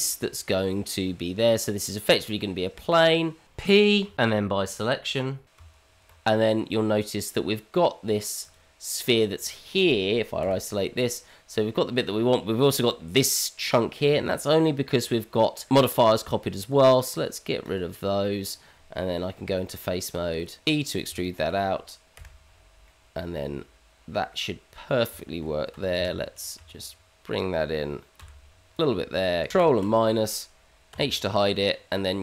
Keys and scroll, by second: 3.4 Tab, 3.7 p, 5.5 Tab, 19.4 Tab, 20.6 e, 21.1 Tab, 22.1 KP_Divide, 25.7 g, 29.5 ctrl+KP_Subtract, 30.9 h.